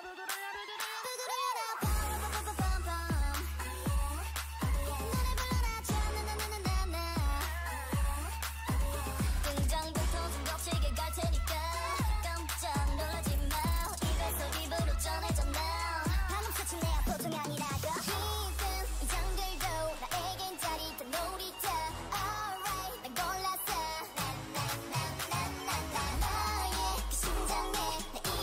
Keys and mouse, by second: 0.4 a, 0.8 Tab, 2.3 Tab, 3.3 ctrl+Tab, 5.8 click, 6.8 x, 7.5 middle click, 9.7 l, 10.2 l, 10.7 x, 14.4 Tab, 15.3 Tab, 15.8 middle click, 19.3 KP_3, 19.8 KP_1, 21.0 KP_3, 21.5 right click, 22.0 r, 22.6 g, 25.0 middle click, 26.5 s.